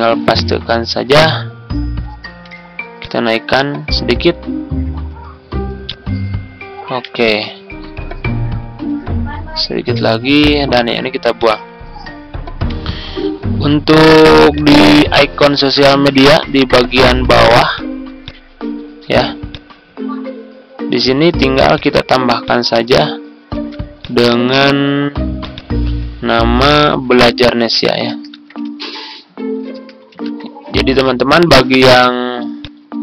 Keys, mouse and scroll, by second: 0.2 ctrl+v, 1.3-1.7 ctrl+scroll down 1, 2.1 ctrl+scroll up 1, 2.9 click, 4.3 ctrl+scroll up 1, 5.8 ctrl+click, 7.2 click, 8.3 ctrl+scroll up 1, 10.2 click, 12.5 Delete, 13.3 ctrl+scroll down 1, 14.4 click, 16.9 ctrl+u, 17.7-21.7 drag, 23.4 ctrl+d, 23.9 click, 26.8 ctrl+a, 27.8-30.7 typing, 32.6 click.